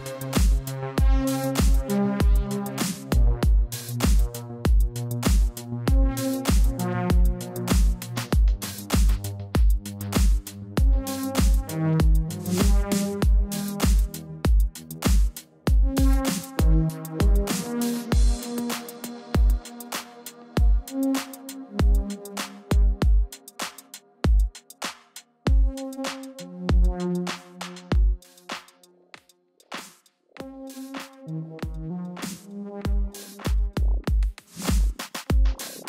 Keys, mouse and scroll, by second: 0.0-1.7 typing, 2.8 space, 3.1 click, 3.3 space, 3.6 Tab, 3.8 space, 3.9 click, 4.0 space, 5.4 space, 5.6 click, 5.7 space, 7.5 space, 7.7 click, 7.7 space, 10.0 space, 10.1 click, 10.2 space, 11.4 space, 11.5 click, 11.6 space, 12.3 space, 12.4 click, 12.5 space, 14.7-15.6 typing, 14.8 click, 15.4 ctrl+-, 15.8 Tab, 17.1 click, 20.5 click, 23.5 click, 27.0 space, 28.3 click.